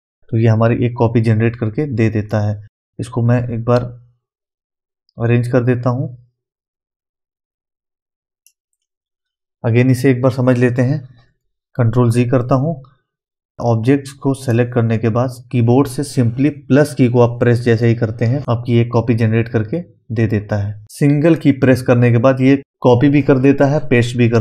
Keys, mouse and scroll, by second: 2.3 click, 2.6 typing, 10.4-10.7 typing, 10.8 ctrl+Num_Lock, 10.8 click, 11.3 ctrl+z, 13.6-16.8 drag.